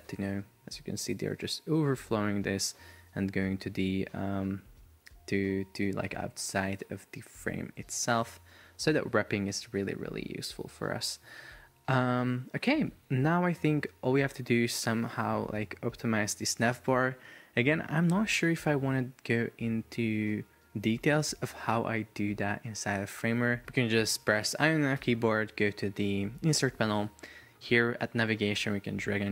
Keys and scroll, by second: 6.2 shift+super+4, 7.5 Escape.